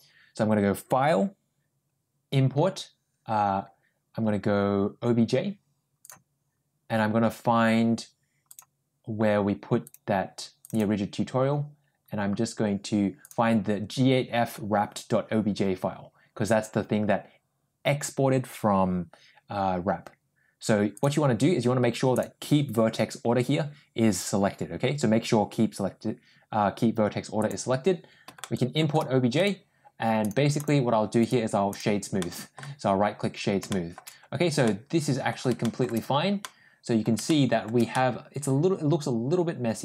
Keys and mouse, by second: 28.2-28.6 shift+middle drag, 29.4 right click, 30.1 click, 30.4 click, 31.2 right click, 32.0-32.4 middle drag, 33.5 shift+middle drag, 34.6 middle click, 35.5 shift+middle click, 36.3-36.9 middle drag, 37.1 shift+middle click, 37.8-39.8 middle drag.